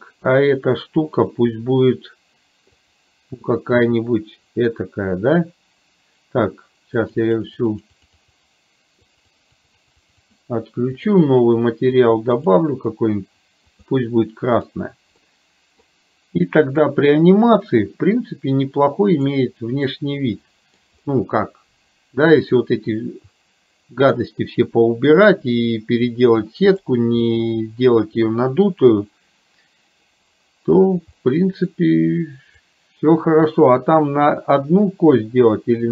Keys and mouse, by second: 2.9 click, 7.4 click, 7.7 click, 8.1 click, 9.5-10.5 drag, 11.2 click, 14.6 click, 15.4 middle click, 17.2-19.6 drag, 20.0-20.7 middle drag, 26.9 click, 27.2-30.0 middle drag, 31.4 middle click, 33.1-35.9 drag.